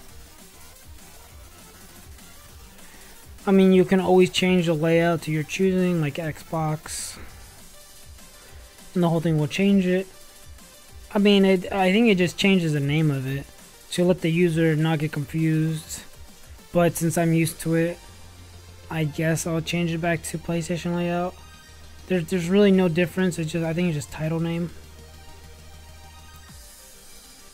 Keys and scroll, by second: 0.6 ., 1.8 c, 2.4 s, 4.0 v.